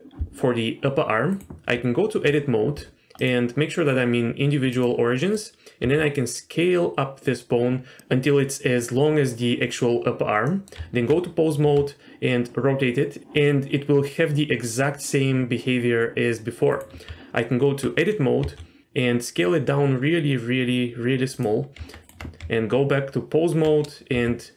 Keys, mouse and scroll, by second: 1.7 Tab, 3.2-4.8 drag, 5.2 middle click, 5.8 s, 8.0 scroll up 1, 10.5 middle click, 10.8 Tab, 11.6 r, 17.0 Tab, 18.4 s, 21.8 Tab, 22.0 Tab, 22.0 r, 22.4 Tab, 24.1 r.